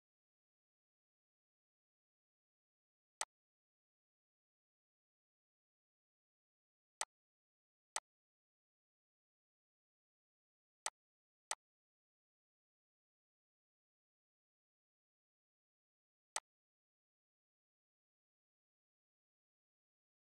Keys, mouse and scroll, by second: 8.0 click, 8.8 s, 11.2 click, 16.4 click.